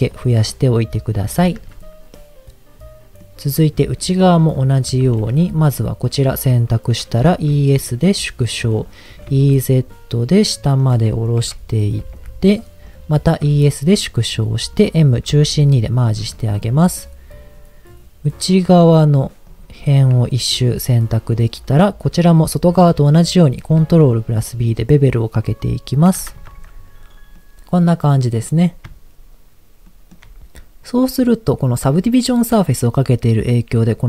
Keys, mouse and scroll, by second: 0.1 click, 0.6 middle click, 1.5 Tab, 2.0-3.3 middle drag, 4.0 middle click, 4.4 click, 4.9 Tab, 5.8 alt+click, 7.4 e, 7.5 s, 8.6 click, 9.1 e, 9.3 z, 10.8 click, 11.4 KP_1, 12.0 g, 12.2 z, 12.9 click, 13.3 e, 13.4 s, 14.4 click, 14.7 middle click, 15.3 m, 18.2 middle click, 19.4 alt+click, 20.2 alt+click, 20.8-21.8 middle drag, 23.0 middle click, 23.7 ctrl+b, 26.0 click, 26.4 Tab, 27.4-28.5 middle drag, 29.8 shift+middle click, 32.6 middle click.